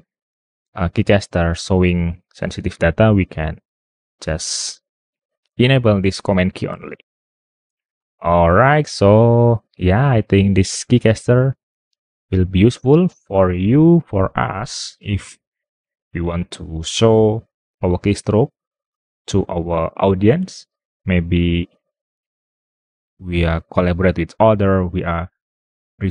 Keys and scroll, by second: 3.0 super+Tab.